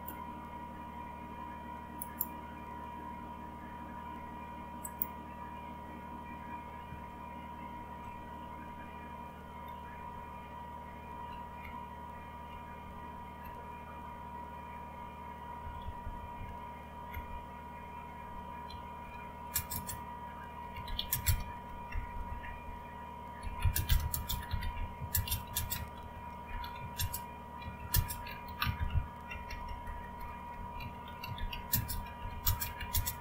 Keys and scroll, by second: 7.1 alt+Tab, 10.0 Down, 10.6-15.6 Down, 15.6 Up, 15.8 Up, 16.0 Up, 16.1 Up, 17.1 Left, 18.7-33.2 typing.